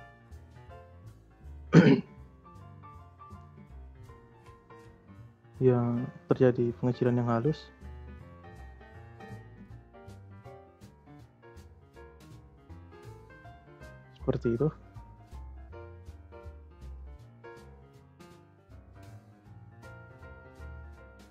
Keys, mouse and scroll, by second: 10.5 space, 11.7 space, 12.2-15.3 drag, 15.3-16.1 scroll down 3, 16.1-17.1 middle drag, 17.1-18.0 scroll up 3, 18.0-18.7 shift+middle drag, 18.7-19.3 scroll down 1, 19.3-21.3 middle drag.